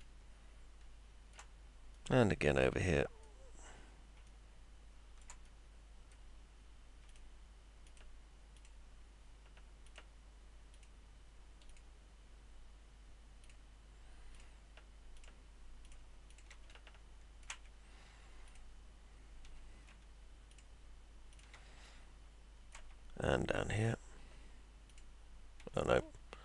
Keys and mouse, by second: 0.0-1.3 alt+middle drag, 1.9 middle click, 4.2-5.2 alt+middle drag, 5.4 middle click, 7.0 ctrl+click, 7.8 ctrl+click, 8.5 ctrl+click, 9.8 ctrl+click, 10.7 ctrl+click, 11.6 ctrl+click, 13.4 ctrl+click, 14.3 ctrl+click, 15.8 ctrl+click, 16.7 alt+middle click, 18.4 ctrl+click, 19.8 ctrl+z, 21.8 alt+middle click, 23.7 ctrl+click, 24.8 ctrl+click, 26.0 ctrl+z.